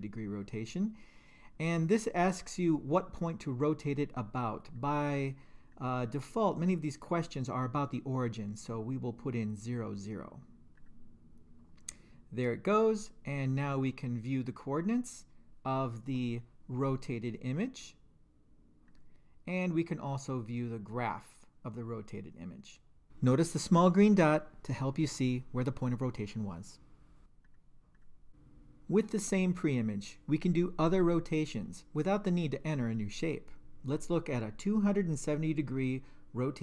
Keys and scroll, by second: 4.6 0, 5.7 Return, 7.1 0, 10.7 Return, 20.9 2, 28.3 Return.